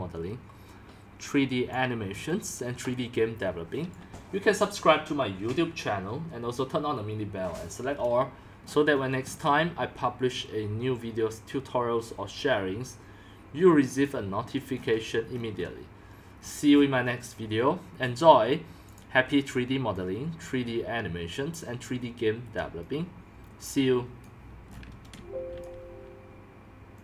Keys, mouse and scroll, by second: 1.7-8.6 drag, 8.6-11.0 scroll down 9, 8.7-11.0 middle drag, 13.9 scroll down 1, 14.0 scroll, 14.0 drag, 14.4 drag, 14.7 scroll down 2, 14.9 scroll, 15.1 scroll down 3, 15.2-16.3 scroll up 10, 16.3-18.9 scroll down 21, 18.9-24.7 drag, 24.7-25.2 scroll up 5, 25.2 x, 25.5 middle click, 25.6-27.0 drag.